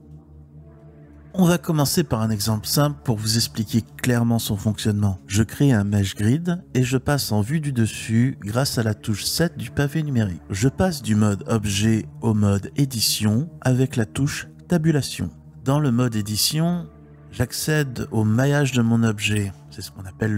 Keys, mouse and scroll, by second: 0.0 a, 0.7 x, 4.2-6.2 drag, 7.5 KP_7, 9.9 Tab.